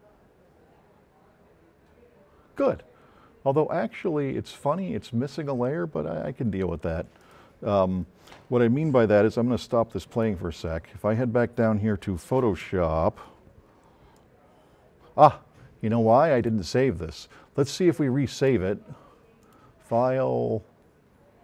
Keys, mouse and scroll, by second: 7.2 click, 10.1 click, 12.3 click, 14.2-16.7 drag, 17.7-18.5 drag, 19.5 click.